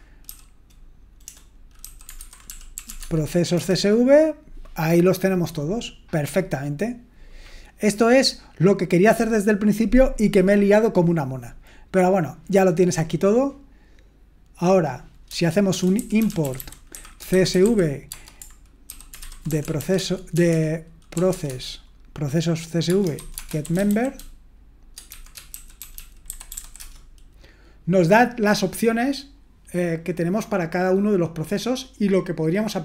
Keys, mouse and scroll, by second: 0.0-3.3 typing, 3.5 Return, 14.6-15.7 drag, 15.5-27.0 typing.